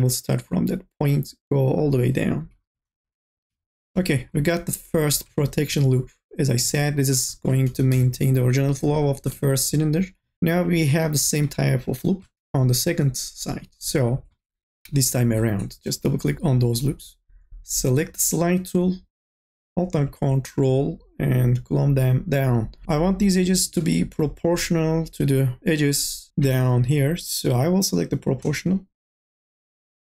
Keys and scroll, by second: 2.4 e, 3.3 2, 3.8 e, 7.5-8.4 typing, 12.4 3, 24.1 ctrl+z.